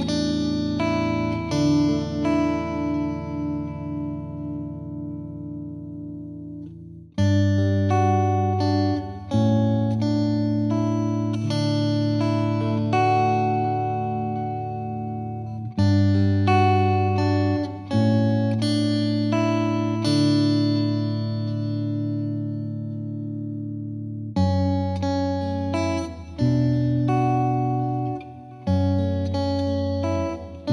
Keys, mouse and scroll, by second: 0.2 ctrl+s, 0.3 ctrl+s, 0.9-2.4 middle drag, 2.5-3.1 shift+middle drag, 3.5-4.2 middle drag, 4.2-4.6 scroll down 1, 4.6 KP_1, 4.8 scroll up 3, 5.0 shift+middle click, 5.1 Tab, 5.4 middle click, 6.1 e, 7.1 Tab, 7.2 z, 7.4-8.0 middle drag, 8.0 KP_1, 8.4 scroll up 1, 8.6-9.1 shift+middle drag, 9.1 scroll down 1, 9.4 KP_1, 9.7 scroll up 1, 9.9 z, 10.1 z, 10.4 scroll down 1, 10.7 Tab, 11.2 ctrl+z, 11.5 ctrl+z, 12.3 e, 15.7 z, 15.8 middle click, 16.0-16.5 scroll down 2, 16.5 Tab, 16.7-17.6 middle drag, 17.6 Tab, 18.0-19.2 drag, 19.2-19.7 middle drag, 19.7 KP_1, 19.9 middle click, 20.2 scroll up 1, 20.2-20.8 middle drag, 20.8-21.9 right drag, 21.9 scroll down 3, 22.0 middle click, 22.5-23.2 drag, 23.7 click, 25.2 scroll down 2, 25.4 middle drag, 25.6 scroll up 2, 25.9 KP_1, 26.1 shift+middle drag, 26.3-27.0 scroll down 1, 27.0 g, 27.6 scroll up 2, 27.7 shift+middle click, 27.8 z, 29.1 z, 29.4-30.1 middle drag, 30.1 scroll down 2, 30.2-30.7 shift+middle drag.